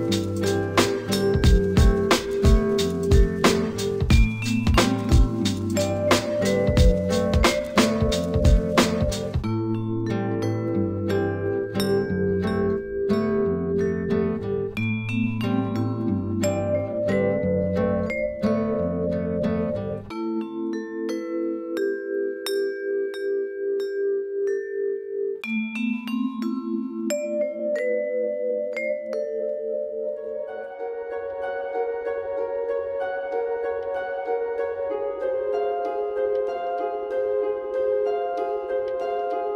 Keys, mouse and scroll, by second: 2.3-4.3 drag, 4.3-7.1 right drag, 7.1 Tab, 9.3-10.6 drag, 12.3 s, 15.9 Tab, 16.4 click, 18.4 click, 20.5 shift+a, 25.5 g, 28.5 click, 29.7 click, 30.9 s, 34.7 Tab, 37.6-38.7 drag, 38.7 e.